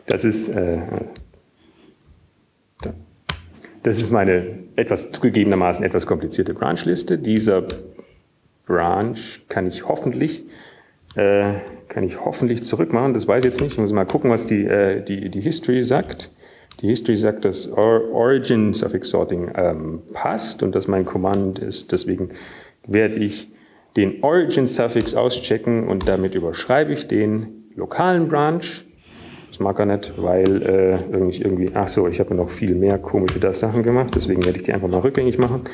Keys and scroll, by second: 2.7 alt+Tab, 6.4 alt+`, 9.5 Up, 10.4 Up, 10.6 Up, 12.0 Left, 17.8 typing, 19.6 Down, 21.0 typing, 23.8-25.1 typing, 29.1 typing, 30.2 typing, 32.7 typing, 34.7 typing.